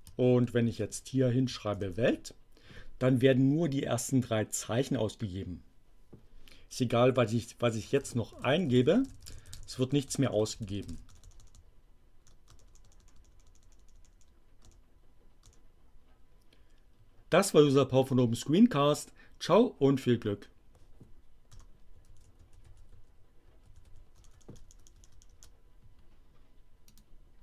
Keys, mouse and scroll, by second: 0.6-2.4 typing, 6.9-11.4 typing, 15.6 BackSpace, 21.5-24.1 typing, 27.0 click.